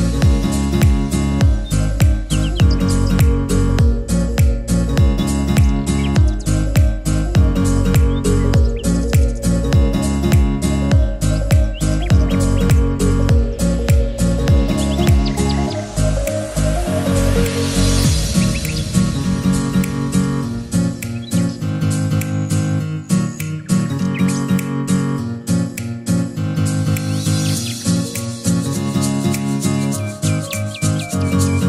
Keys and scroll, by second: 2.2 ctrl+d, 17.9 ctrl+t, 24.9 ctrl+z.